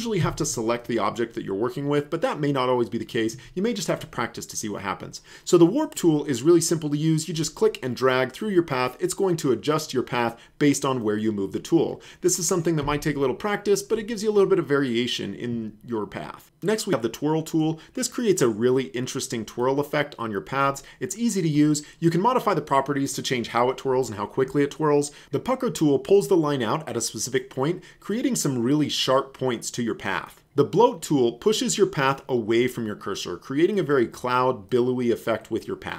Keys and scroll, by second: 0.2 v, 12.8 space.